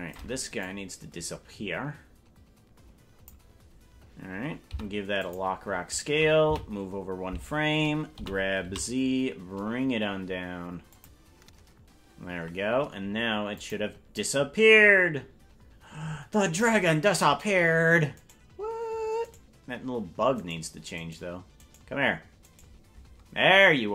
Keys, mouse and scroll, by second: 0.7-3.4 drag, 4.7 i, 6.6 Right, 8.1 g, 13.6 click, 14.2-16.7 drag, 18.3 right click.